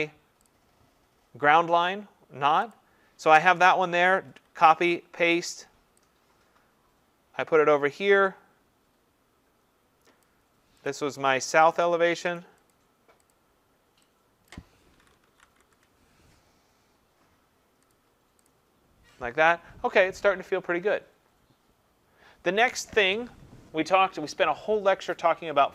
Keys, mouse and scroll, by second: 0.5 click, 2.7 click, 4.3 ctrl+c, 4.7 ctrl+v, 10.2 click, 10.9 click, 11.6 click, 11.8 click, 12.4 click, 12.7 click, 13.3 click, 14.5 click, 14.7-16.1 typing, 17.9 click, 18.5 click.